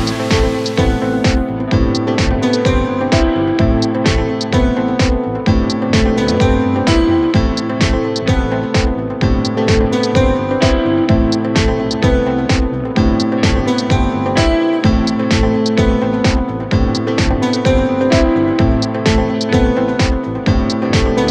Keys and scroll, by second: 1.9 Right, 15.9 space.